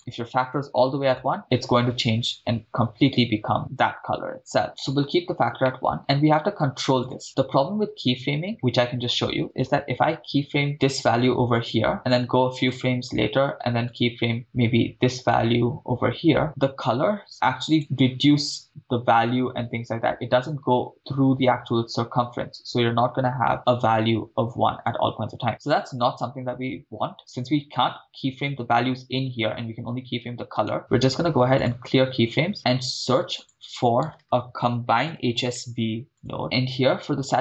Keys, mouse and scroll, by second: 1.1 click, 5.6-6.2 middle drag, 7.0 click, 11.1 i, 12.8 click, 13.9 click, 16.4 i, 16.4-17.4 drag, 17.7 click, 25.5 click, 30.6-32.5 right drag, 32.5-32.8 middle drag, 33.0 shift+a, 34.2 BackSpace, 36.4 middle click.